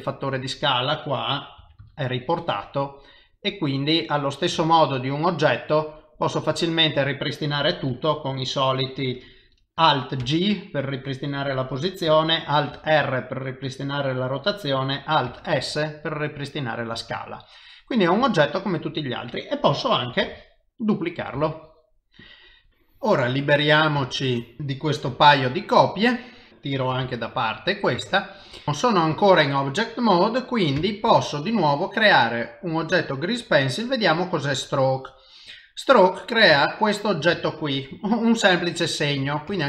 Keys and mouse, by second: 0.0 middle click, 1.6 s, 3.3 middle click, 4.6 shift+middle click, 5.0 middle click, 10.2 alt+g, 12.7 alt+r, 15.3 alt+s, 16.0 middle click, 17.2 shift+middle click, 17.7 middle click, 18.3 shift+middle click, 18.9 shift+middle click, 20.2 shift+d, 21.4 shift+d, 22.5 middle click, 23.4 click, 24.2 shift+click, 25.1 x, 26.0 middle click, 26.5 click, 27.0 g, 28.0 shift+middle click, 28.6 middle click, 29.2 shift+middle click, 29.8 middle click, 30.8 shift+a, 35.8 middle click, 36.7 ctrl+middle click, 37.4 shift+middle click, 38.0 middle click, 39.5 ctrl+Tab.